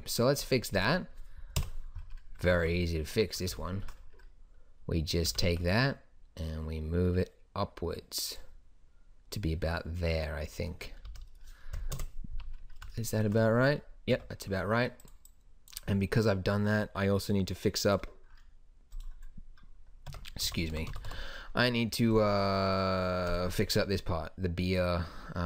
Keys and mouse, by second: 0.0 Escape, 1.7 KP_1, 2.5 Tab, 5.4 g, 11.2 z, 12.1 KP_0, 12.5 z, 14.3 Tab, 20.3 Tab, 20.6 a, 20.9 a, 21.0 a, 21.2 a.